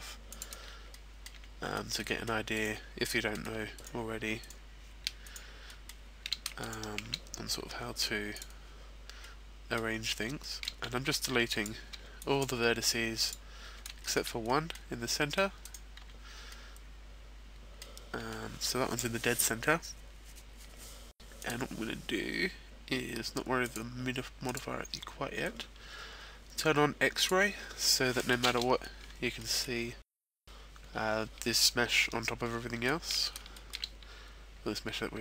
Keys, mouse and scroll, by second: 0.9 middle click, 1.3 z, 2.0 middle click, 2.5 right click, 3.0 middle click, 3.7 shift+right click, 4.5 shift+right click, 5.6 shift+right click, 5.6 shift+middle click, 6.6 shift+right click, 7.6 x, 9.2 middle click, 10.3 shift+middle click, 10.8 z, 12.4 b, 13.2 x, 14.0 shift+middle click, 14.4 middle click, 15.1 middle click, 15.6 right click, 16.0 z, 16.5 middle click, 21.3 click, 23.5 click, 24.7 click, 27.1 click, 27.8 middle click, 30.9 middle click, 32.2 shift+middle click, 35.0 shift+middle click.